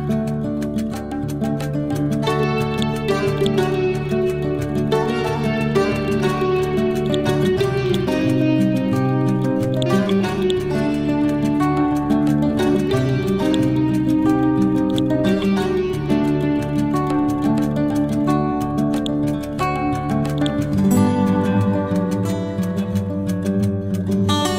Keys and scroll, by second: 3.2 c, 21.5 t, 22.1 Up.